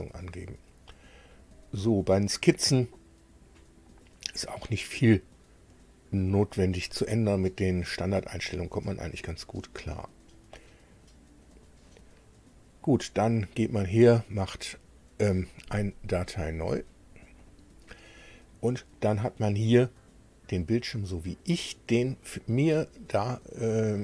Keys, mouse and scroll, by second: 1.3 click, 5.7 click, 6.4 click, 7.7 click, 10.1 click, 11.5 click, 16.5 click, 17.4 click.